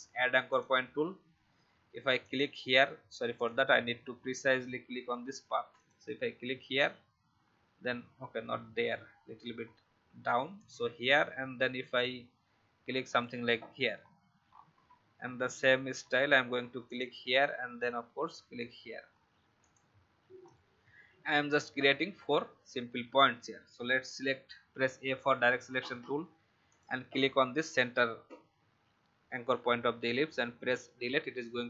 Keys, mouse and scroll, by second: 3.9-5.7 alt+scroll up 1, 5.7 click, 8.6 ctrl+z, 10.5 click, 14.0-14.8 alt+scroll down 2, 15.1 alt+scroll up 1, 16.8 click, 20.3-20.7 alt+scroll down 1, 24.7 a, 26.6 click, 30.4 Delete.